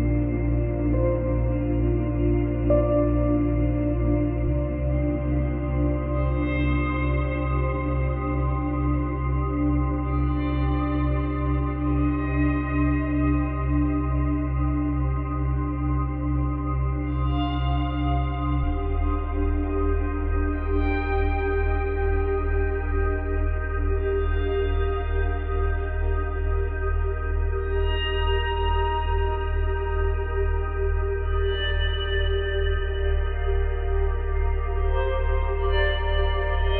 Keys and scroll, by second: 4.1 F9, 10.4 space, 16.3 space, 22.2 ctrl+z.